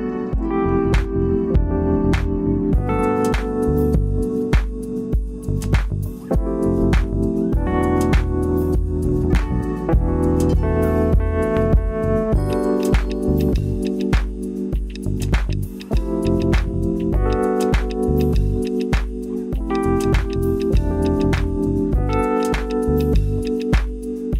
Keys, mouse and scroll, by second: 1.6 click, 4.2 click, 4.6-6.8 drag, 7.1 click, 8.8 Tab, 9.8 middle click, 10.3 middle click, 11.7 click, 12.1 shift+click, 12.9 middle click, 15.7 click, 16.9 alt+shift+click, 17.1 alt+shift+click, 18.7 shift+click, 20.3 middle click, 21.2 shift+middle drag, 21.4 shift+drag, 22.6 shift+click, 23.9-24.3 middle drag.